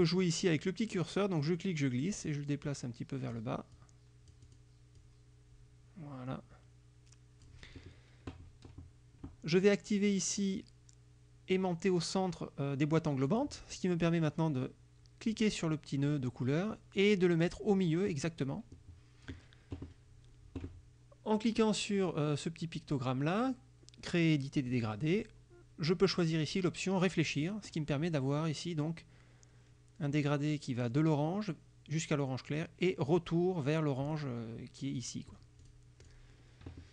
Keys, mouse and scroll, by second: 1.5-3.6 drag, 3.8 click, 5.0-7.7 drag, 13.4 click, 15.4-18.4 drag, 24.8 click, 26.1 click, 27.4 click, 35.1 click, 35.7 click, 36.1 click.